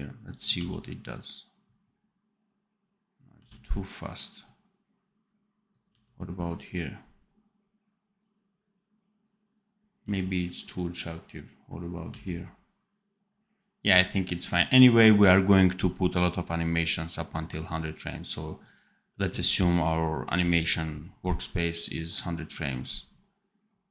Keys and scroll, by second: 0.5 d, 3.3 d, 5.8 d, 9.9 d, 12.0 d.